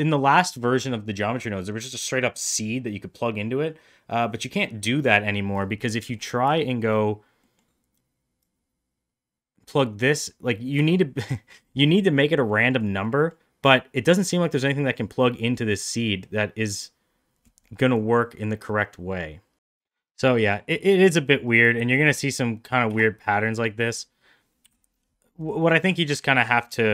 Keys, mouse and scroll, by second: 6.2 middle click, 7.4 middle click, 8.4-11.6 drag, 12.6 middle click, 13.1 middle click, 15.9 click, 20.1 middle drag, 20.6 middle drag, 21.8 shift+d, 24.6 Delete, 25.4 click, 25.7 middle click, 25.9 shift+middle drag, 26.4 middle drag.